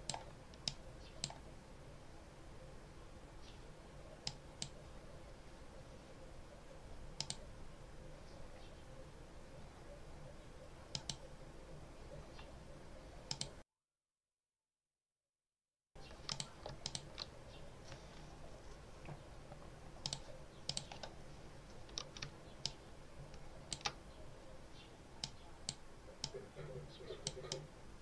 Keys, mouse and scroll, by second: 0.5-1.3 drag, 4.1 click, 7.1 click, 10.8 click, 13.1 click, 16.2 click, 16.7 shift+click, 19.9 click, 20.5 click, 22.5-23.8 ctrl+drag, 25.1-25.7 drag, 26.1-27.3 drag.